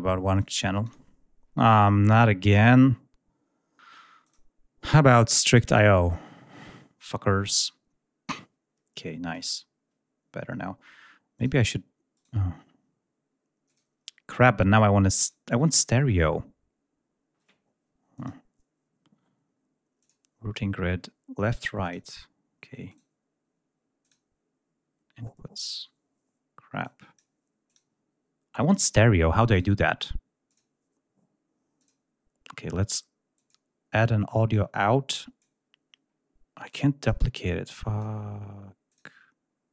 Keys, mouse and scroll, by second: 0.3 click, 0.8 click, 4.2 click, 5.3 click, 9.2 click, 11.3 click, 12.1 right click, 13.6 click, 15.1 right click, 15.8 click, 18.1 click, 19.9 click, 21.8 click, 22.8 click, 23.9 click, 26.8-27.3 drag, 27.6 click, 29.5 right click, 30.4 click, 31.7 click, 33.3 click, 34.4-35.5 drag, 36.6-37.2 drag, 37.7-38.1 drag, 38.8 click.